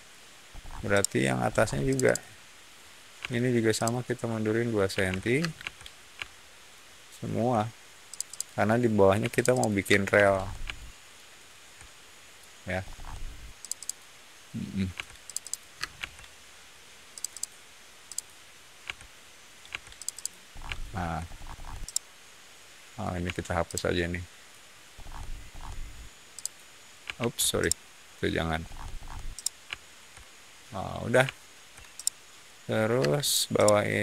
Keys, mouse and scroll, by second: 0.4-0.7 scroll up 2, 0.7-1.2 shift+middle drag, 1.4 shift+middle click, 1.8 shift+click, 1.9 shift+click, 3.1 p, 3.7 click, 4.8 2, 5.0 Return, 5.3 space, 5.5 Escape, 6.1 shift+middle click, 6.9 shift+middle drag, 8.0 shift+click, 8.2 shift+click, 9.1 p, 9.2 click, 9.4 click, 9.8 space, 10.0 Escape, 10.2 middle click, 10.6 shift+middle click, 11.3 shift+middle click, 12.7 shift+middle drag, 13.5 shift+click, 13.7 shift+click, 14.9 p, 15.2 click, 15.3 click, 15.7 space, 15.9 Escape, 17.0 click, 17.2 click, 18.0 click, 18.8 p, 19.6 Escape, 19.9 click, 20.1 click, 20.4 middle click, 20.6 shift+middle click, 21.2-21.6 scroll up 2, 21.7-22.9 shift+middle drag, 23.2 e, 23.6 click, 24.9 scroll down 1, 25.4 scroll up 1, 26.3 click, 27.1 ctrl+z, 27.4 scroll up 1, 27.5 middle click, 28.5-29.0 scroll down 2, 29.2-31.6 middle drag, 31.9 shift+middle click, 32.9 space, 33.2 click, 33.5 middle click.